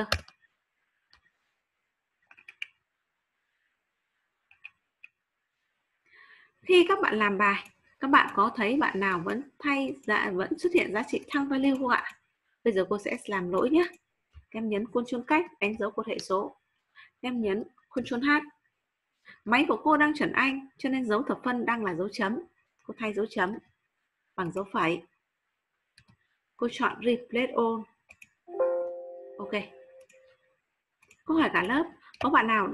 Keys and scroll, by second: 15.3 ctrl+space, 17.9 ctrl+h.